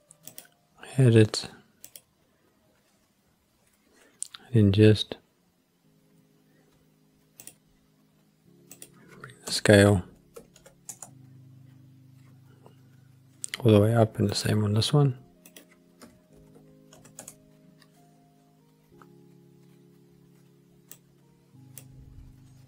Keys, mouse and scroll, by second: 0.3-2.1 drag, 7.4 click, 8.7-11.1 drag, 14.3 click, 15.4-17.3 drag, 20.9 click.